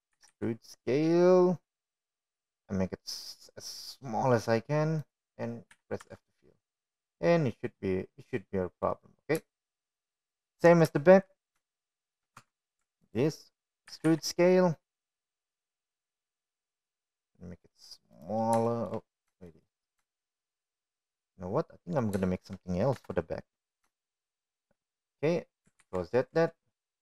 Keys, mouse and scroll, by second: 0.0 ctrl+z, 0.4 ctrl+z, 3.0 e, 8.7 f, 8.9 Tab, 9.7 click, 11.2-11.8 middle drag, 12.5 shift+middle drag, 13.2 middle click, 13.9 shift+middle drag, 14.6-15.1 shift+middle drag, 15.3 Tab, 16.0 alt+click, 16.9 e, 21.6 shift+middle click, 22.5 shift+middle click, 23.2 shift+middle click, 24.2 middle click, 25.2 shift+middle click, 25.9 KP_1, 26.9 shift+middle click.